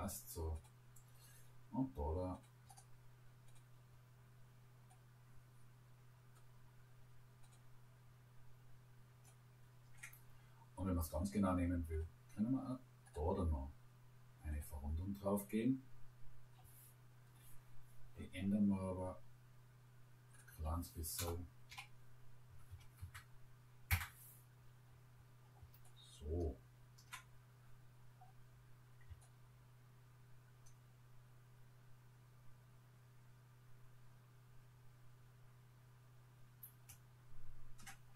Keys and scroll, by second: 21.2 0, 21.7 ., 22.5 1, 22.7 5, 23.0 Return.